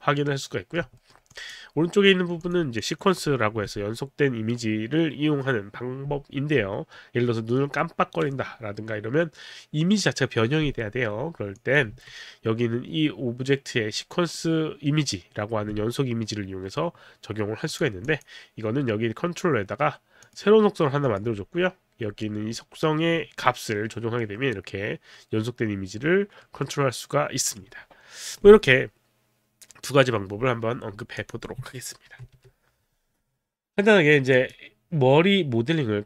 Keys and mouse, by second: 1.0 alt+middle click, 1.3 click, 2.4 click, 2.7 click, 11.6 click, 11.9 w, 14.0 middle click, 17.7 click, 18.1 click, 20.2 click, 21.0 click, 23.4 middle click, 31.2 click, 32.1 ctrl+n, 34.4 click.